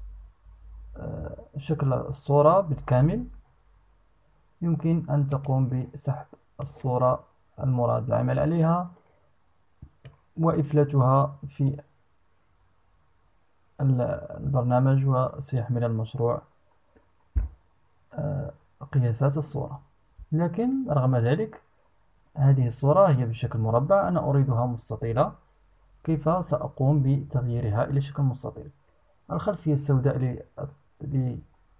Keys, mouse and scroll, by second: 4.8 click, 6.2-9.8 drag.